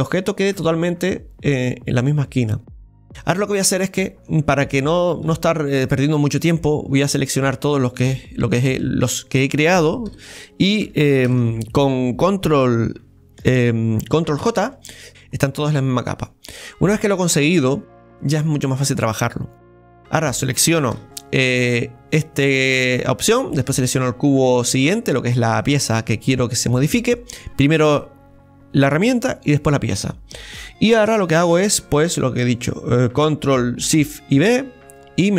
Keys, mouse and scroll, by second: 6.3 Tab, 6.3-7.4 middle drag, 7.4-10.1 shift+right drag, 10.1 KP_7, 11.3 ctrl+KP_7, 16.4 scroll down 1, 17.0-20.9 middle drag, 20.9 ctrl+KP_7, 23.7-26.6 shift+right drag, 34.4 ctrl+shift+b.